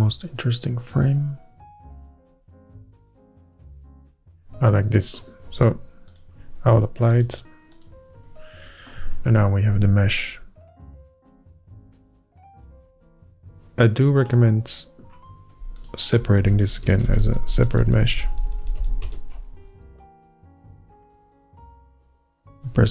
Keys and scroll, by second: 10.9 Tab, 17.1 ctrl+KP_Add, 17.3 ctrl+KP_Add, 17.4 ctrl+KP_Add, 17.6 ctrl+KP_Add, 17.7 ctrl+KP_Add, 17.9 ctrl+KP_Add, 18.0 ctrl+KP_Add, 18.2 ctrl+KP_Add, 18.3 ctrl+KP_Add, 18.4 ctrl+KP_Add, 18.6 ctrl+KP_Add, 18.7 ctrl+KP_Add, 18.9 ctrl+KP_Add, 19.2 ctrl+KP_Add.